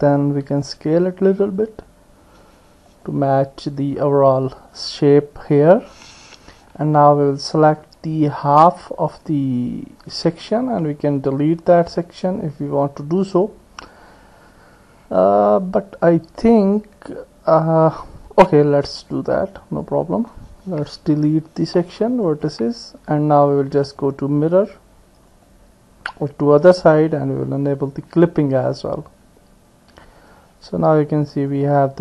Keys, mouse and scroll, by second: 0.2 s, 8.7 click, 19.0 click, 21.2 Delete, 24.0-25.6 drag, 26.7 click, 31.5 click.